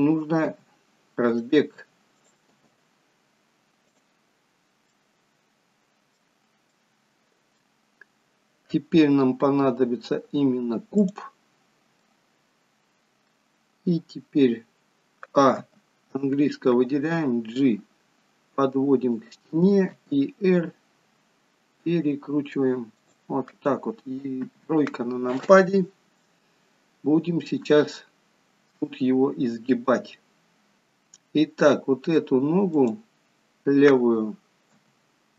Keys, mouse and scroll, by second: 0.6 g, 2.3 click, 2.6 g, 5.0 middle click, 6.8 middle click, 8.2-9.8 scroll down 3, 11.1 click, 12.1 middle click, 15.8 a, 16.8 g, 20.0 r, 24.5 KP_3, 28.0 shift+middle click, 29.0 scroll up 4, 32.7 click, 34.8 g.